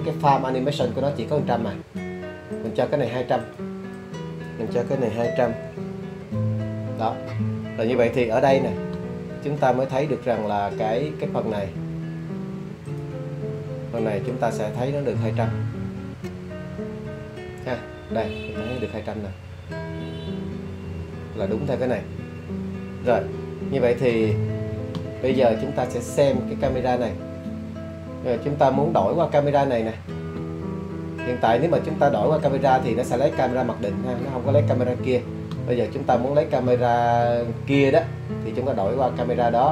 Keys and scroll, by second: 1.5-4.0 typing, 5.5-6.1 typing.